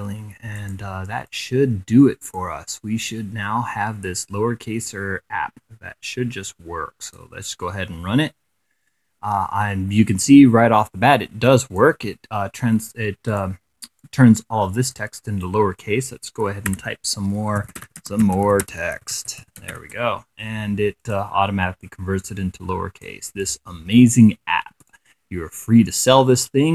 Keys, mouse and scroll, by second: 0.1 click, 0.9 click, 1.9 click, 6.6 click, 11.0 click, 16.2 Caps_Lock, 16.9-19.8 typing, 20.6 click, 21.4-22.8 drag, 23.0 click, 24.4-26.7 drag.